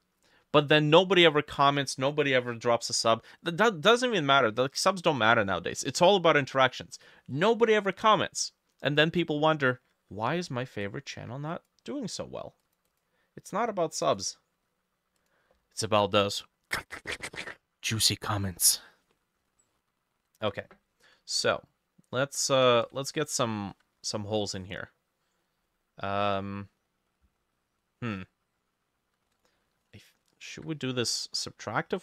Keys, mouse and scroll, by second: 10.6 t, 12.9 double click, 19.6 middle click, 20.5 b, 23.2 ctrl+middle click, 30.6-32.0 drag, 30.6 e.